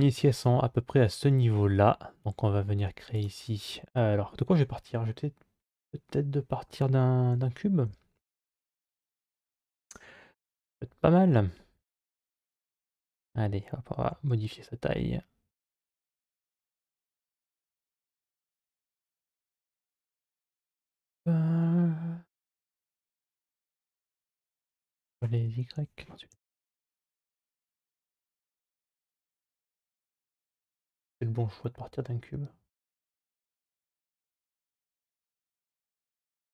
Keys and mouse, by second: 3.0 click, 7.2 shift+a, 11.8 Tab, 13.8 s, 17.9 middle click, 21.4-22.4 middle drag, 23.7 s.